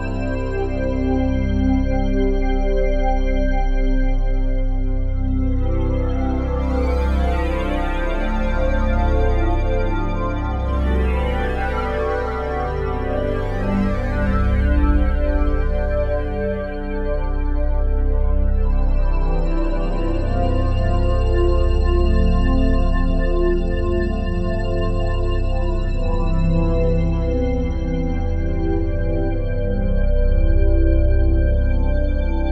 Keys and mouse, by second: 0.0-1.5 typing, 3.0-5.5 drag, 5.3-6.8 typing, 8.6 ctrl+click, 8.9-10.2 typing, 9.1-10.2 drag, 11.6-12.8 drag, 12.8-15.0 typing, 15.7-17.1 drag, 16.9-17.6 typing, 18.1 click, 18.8 click, 19.4 click, 19.8 click, 20.8-21.6 alt+drag, 22.2-23.7 typing, 22.4-23.7 shift+drag, 25.0-26.5 typing, 25.7-26.2 ctrl+alt+drag, 29.1 alt+click, 29.6 typing.